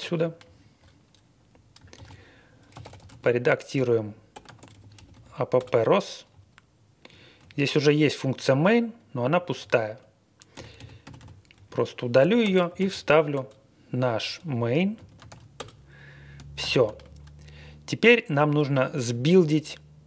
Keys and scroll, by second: 1.9 super+c, 2.4-5.5 typing, 6.3-6.8 Page_Down, 6.8 Down, 7.4 Up, 7.5 Up, 9.3 Up, 9.6 Down, 10.5-12.2 typing, 11.5 Up, 12.4 Return, 12.8 super+v, 13.3 Return, 14.2 Escape, 14.7-15.8 typing, 16.6 ctrl+l.